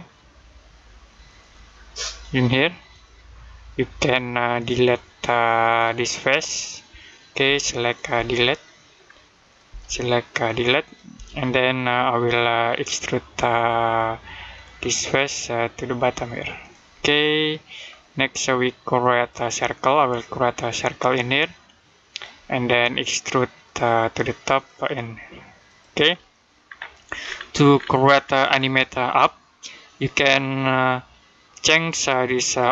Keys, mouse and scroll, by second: 7.3 Delete, 7.8 click, 8.0 Delete, 8.3 middle click, 9.3 click, 9.5 Delete, 9.8 middle click, 10.7 click, 11.0 Delete, 12.6 click, 13.4 middle click, 14.9 click, 16.8 middle click, 19.0 click, 26.0 middle click, 26.5-27.2 scroll down 1, 28.1 scroll up 1, 31.4 click, 32.6 click.